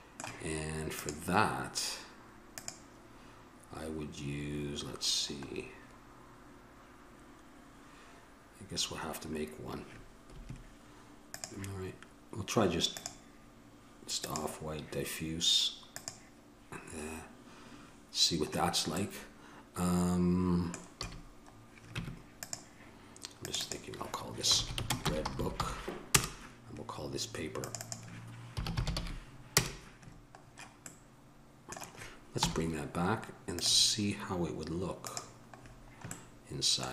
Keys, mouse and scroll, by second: 1.3-2.6 middle drag, 2.6-17.9 drag, 19.4-21.2 middle drag, 21.2 a, 22.2 Tab, 25.6 o, 31.1-32.6 middle drag, 32.6 m, 35.3-36.3 drag, 36.3-36.9 middle drag.